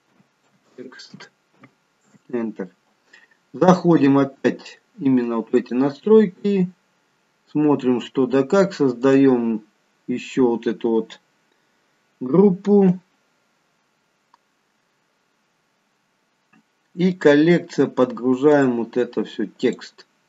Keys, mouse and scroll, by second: 5.6 click, 7.1-8.3 scroll up 1, 8.3 scroll up 5, 9.1 click, 16.4-17.1 scroll down 1, 17.1 click, 17.7-18.6 scroll down 2, 18.6 click, 18.6-19.4 scroll down 1.